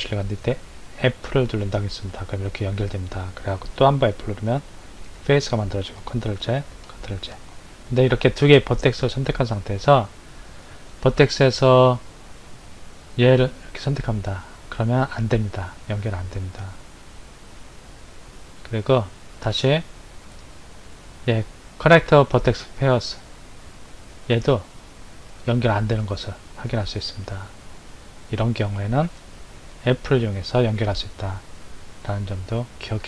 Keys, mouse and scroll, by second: 1.0 f, 4.1 f, 6.4 ctrl+z, 6.9 ctrl+z, 10.8-13.8 drag, 19.4-22.4 drag, 24.7 click, 25.9 click, 27.0 click, 29.7 f, 30.8 click, 32.5-33.0 scroll down 2.